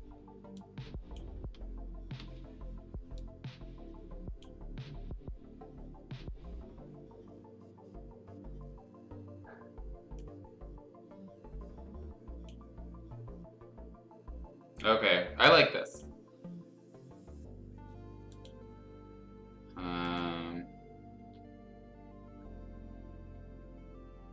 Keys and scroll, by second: 2.2 ctrl+z, 21.2 F2.